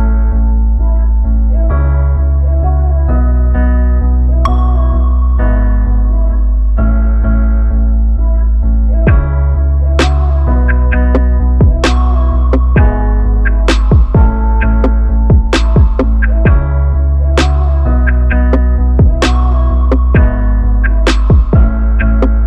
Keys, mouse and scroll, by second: 0.2 s, 2.0-3.3 drag, 7.0-8.0 middle drag, 8.0 KP_3, 9.4-10.9 drag, 12.0-13.8 middle drag, 17.1-18.9 middle drag, 19.2 middle click.